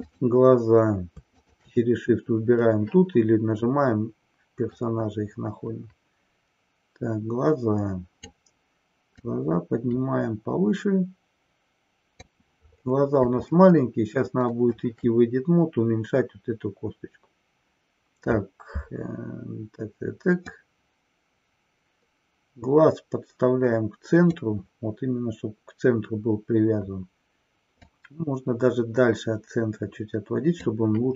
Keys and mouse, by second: 4.7-8.4 drag, 9.3-12.3 drag, 13.7-14.8 shift+middle drag, 20.3-24.5 drag, 27.8-30.5 drag.